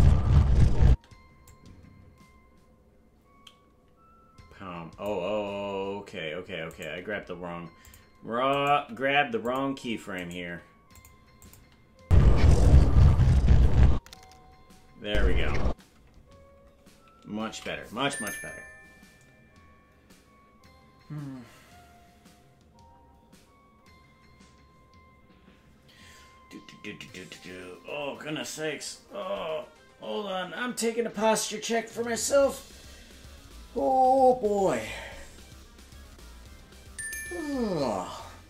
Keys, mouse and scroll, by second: 0.9 space, 1.5-5.1 drag, 6.7 right click, 6.9 g, 8.5 right click, 8.7 g, 10.2 right click, 10.4 g, 11.4 click, 12.0 space, 15.0 space, 15.6 space, 19.7 ctrl+s.